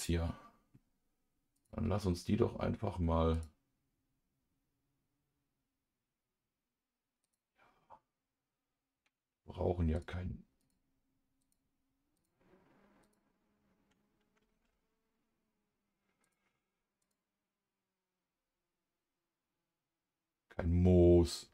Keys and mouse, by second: 1.5 click, 3.3 click, 7.2 click, 9.9 click, 11.4 click, 12.1 click, 13.0 click, 14.5 ctrl+s, 16.2 click, 17.0 click.